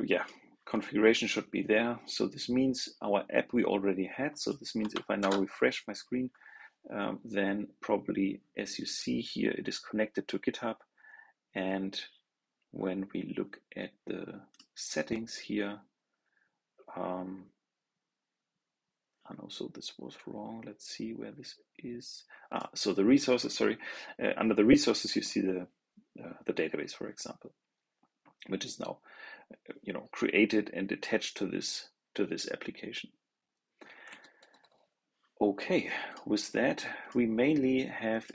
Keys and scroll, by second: 5.1 super+r.